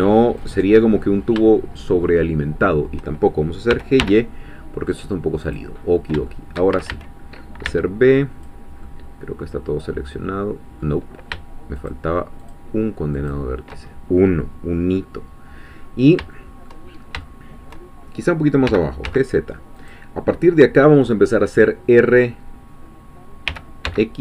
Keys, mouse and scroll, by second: 0.4 click, 0.9-1.3 scroll up 2, 3.7 g, 4.0 y, 5.5 click, 5.9 scroll up 2, 6.3 shift+middle click, 6.7 shift+a, 7.7 b, 8.1 click, 8.8-11.3 middle drag, 11.8 shift+click, 12.5-13.5 shift+drag, 14.9-16.8 middle drag, 16.9 shift+scroll up 2, 17.2-18.2 shift+middle drag, 18.7 g, 19.1 z, 19.8 click, 23.6 r, 23.9 x.